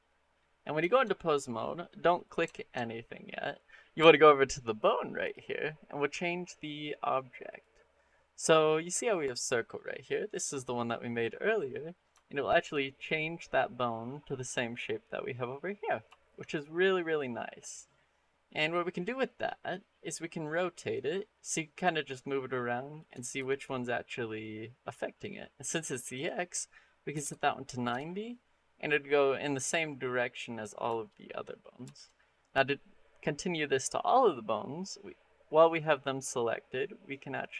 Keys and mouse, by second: 0.7 shift+middle click, 1.1 middle click, 2.3 shift+middle click, 2.7 middle click, 7.4-10.2 drag, 12.0 shift+middle click, 16.0 shift+middle drag, 16.6 middle click, 17.7 middle click, 20.3-22.8 drag, 23.2 ctrl+z, 24.2-25.6 drag, 26.0-27.8 drag, 28.6 middle click, 30.8 shift+middle click, 31.1-31.5 middle drag, 31.7 shift+middle click, 37.2-37.5 drag.